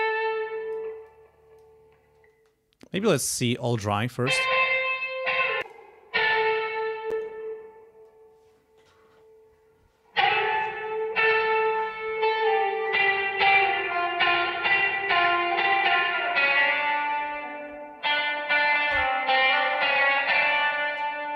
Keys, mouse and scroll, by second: 0.1 click, 1.0 click, 2.3 space, 3.0 click, 3.8 space, 5.6 click, 7.1 click, 15.0 click, 16.8-18.3 drag, 19.8 click.